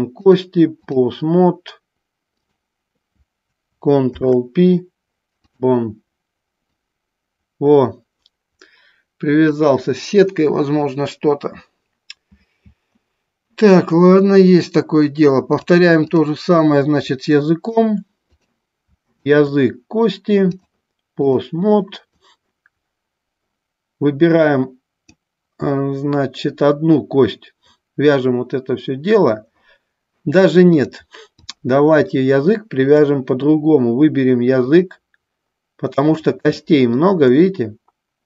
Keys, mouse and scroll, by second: 0.5 click, 2.6-4.7 drag, 4.7 ctrl+p, 6.8-9.8 drag, 15.8 click, 17.5 shift+middle click, 18.5 click, 19.4 shift+click, 20.6 click, 22.4-25.2 drag, 30.9 click, 32.2 shift+middle click, 34.7 click, 36.7 shift+middle click.